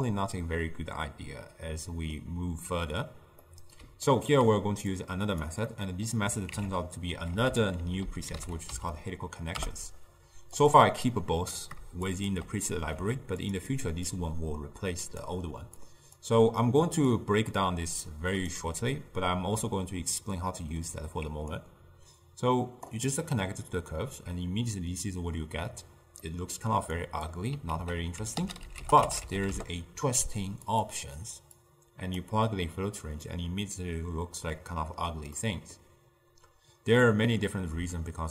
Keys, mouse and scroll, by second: 1.8-5.0 middle drag, 5.0 click, 5.7 middle click, 6.6 ctrl+a, 11.1 click, 12.1 shift+click, 13.1 g, 13.8 drag, 14.1 click, 15.9 click, 17.2 click, 21.6-24.4 drag, 24.4-27.1 middle drag, 27.1 click, 27.8 ctrl+a, 31.7-33.3 drag, 33.3-38.1 middle drag, 38.1-38.3 shift+drag.